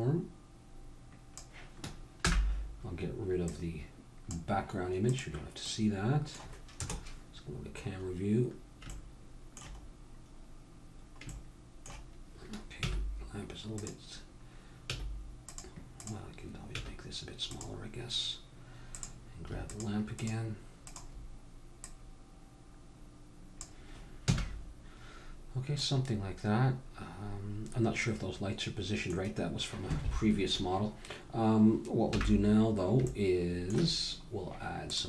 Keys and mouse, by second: 2.3 n, 3.4-7.0 drag, 6.8 KP_0, 7.9 middle click, 10.7 middle click, 12.8 s, 14.8 s, 16.0-18.5 drag, 16.7 s, 18.9-23.8 drag, 24.3 a, 25.8 middle click, 32.1 n, 33.1-34.9 middle drag, 34.9-35.0 drag.